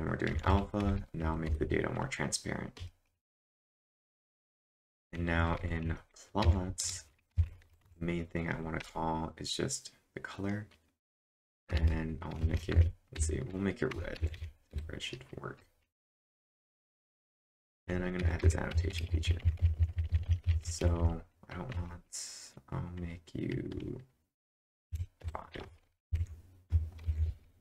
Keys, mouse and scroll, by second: 3.6-6.8 typing, 8.6-10.2 typing, 11.7-15.0 typing, 16.8-21.3 typing, 24.6-25.6 typing, 26.1 ctrl+s, 27.0 ctrl+`, 27.0 typing.